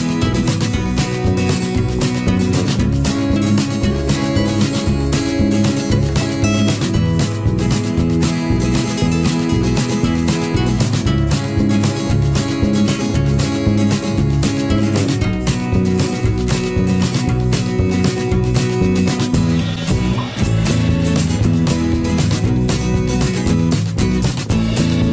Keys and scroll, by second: 5.5 Return.